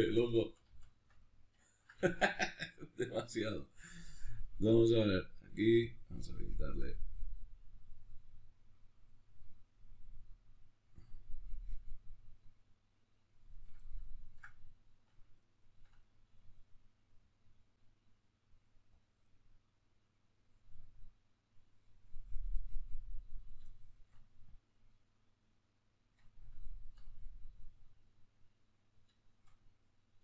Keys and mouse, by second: 4.9 click, 5.6-13.6 drag, 13.6-16.3 ctrl+middle drag, 16.3-23.4 drag, 23.4 shift+middle click, 24.2-26.2 drag, 26.2-30.2 ctrl+middle drag.